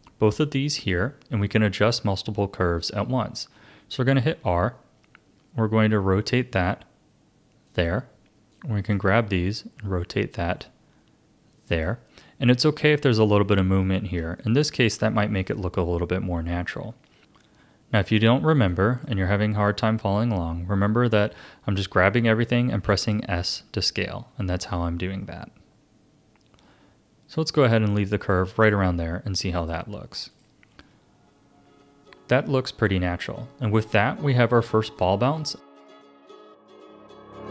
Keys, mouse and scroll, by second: 4.3 r, 8.5 click, 9.5 r, 14.4-17.2 shift+middle drag, 18.7 click, 22.8 s, 28.7 a, 29.6-32.4 drag, 32.4-32.9 scroll down 2, 33.2-36.3 shift+middle drag.